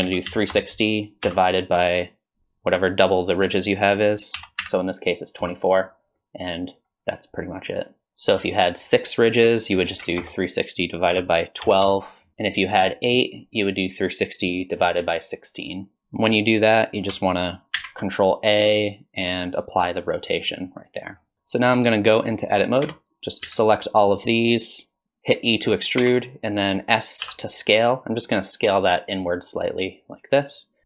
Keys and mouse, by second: 8.0 ctrl+z, 8.4-16.0 drag, 17.8 ctrl+a, 20.5-21.1 middle drag, 22.8 Tab, 23.4 a, 26.0 e.